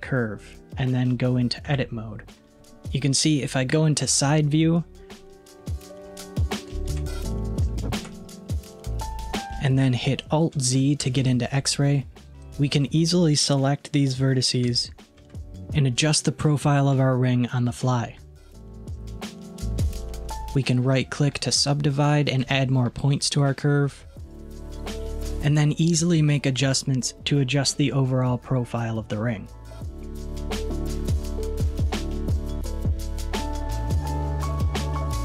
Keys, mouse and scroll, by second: 1.7 Tab, 3.8 KP_3, 5.6-6.3 scroll up 4, 6.3-7.4 shift+middle drag, 7.4 scroll up 1, 7.7-9.4 shift+middle drag, 11.1 alt+z, 12.4 click, 14.7 g, 20.6-21.7 right drag, 24.2 click, 25.0 g, 31.6 click, 33.0 shift+click, 33.6 s.